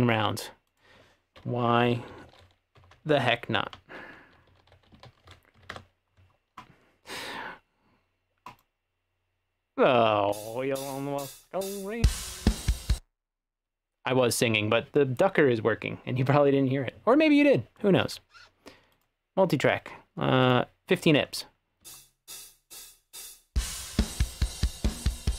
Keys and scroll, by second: 1.6-5.6 typing, 5.6 Page_Down, 5.8 Return, 10.4 space, 13.0 space, 21.9 space.